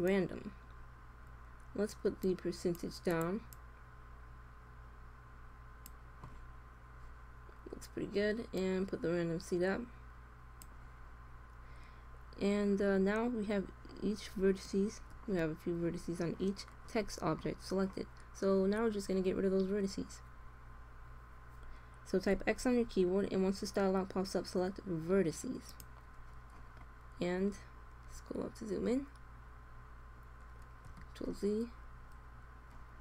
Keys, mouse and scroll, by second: 2.2-5.2 drag, 8.3-10.5 drag, 13.5-16.5 middle drag, 22.3 x, 27.3-30.9 middle drag, 30.9 ctrl+z.